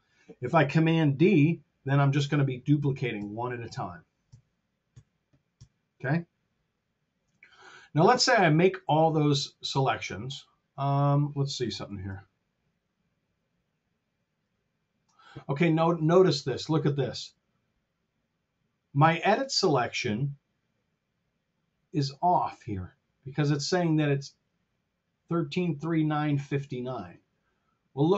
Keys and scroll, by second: 0.8 super+z, 2.6 super+d, 7.3 r, 11.8 shift+Return.